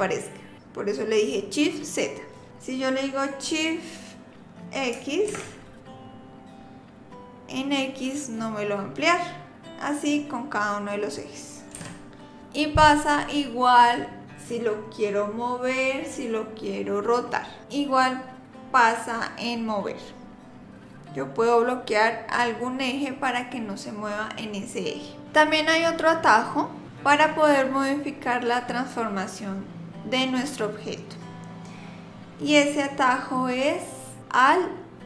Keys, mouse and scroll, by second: 11.8 ctrl+z.